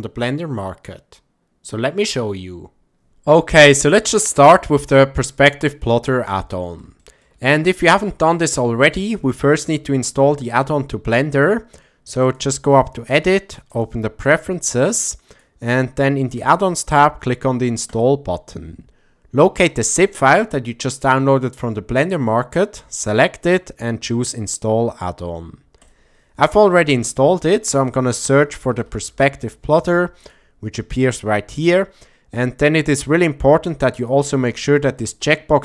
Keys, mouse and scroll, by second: 0.9-1.5 drag, 1.7-2.1 drag, 2.5-3.1 drag, 3.6 ctrl+middle click, 4.3-6.8 middle drag, 7.0 shift+middle click, 7.5-8.8 middle drag, 12.3-13.9 drag.